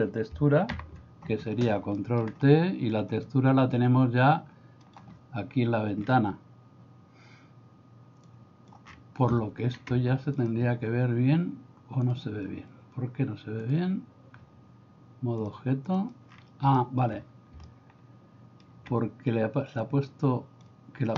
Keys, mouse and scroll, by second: 1.5 ctrl+t, 1.9 middle click, 3.1-5.1 drag, 8.3 click, 10.4 click, 12.1 click, 15.6 click, 16.8 shift+middle click, 17.7 shift+middle click, 19.8 click.